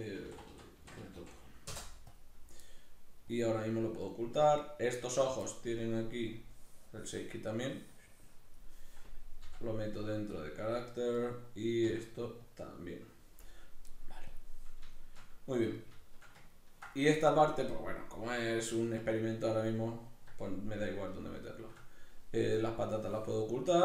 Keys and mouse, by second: 3.3-4.4 drag, 4.4 right click, 6.3-11.2 drag, 9.4 m, 11.2 right click, 11.8 m, 14.3-14.9 drag, 14.9-15.6 shift+middle drag, 15.6 right click, 16.0-22.6 shift+middle drag, 22.6-23.5 drag, 23.5-23.8 shift+middle drag.